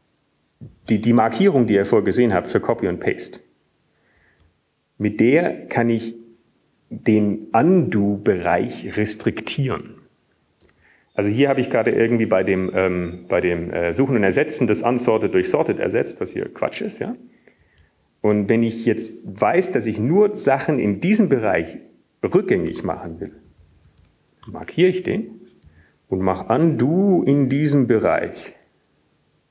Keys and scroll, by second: 0.5 Up, 1.7 Down, 2.2 Up, 2.7 Up, 9.7 Down, 13.1-18.3 Right, 23.9 Up, 25.5 ctrl+space, 26.6 Down.